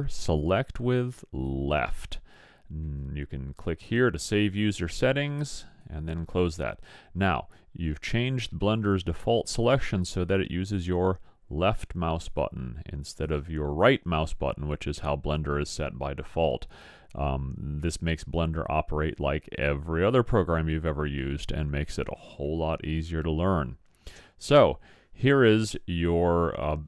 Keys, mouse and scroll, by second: 10.7-15.1 drag.